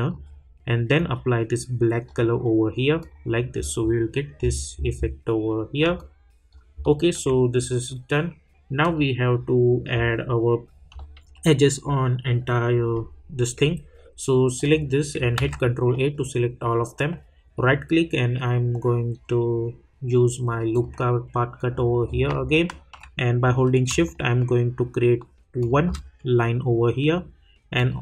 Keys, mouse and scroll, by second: 3.5 scroll down 1, 5.9 alt+click, 6.8 alt+middle click, 7.5 scroll up 1, 8.8 click, 14.6 click, 15.3 ctrl+a, 17.5 right click, 20.7 click, 21.6 scroll down 1, 22.4 alt+scroll down 1, 22.5 alt+middle click, 23.4-23.9 scroll up 1, 25.6 shift+click.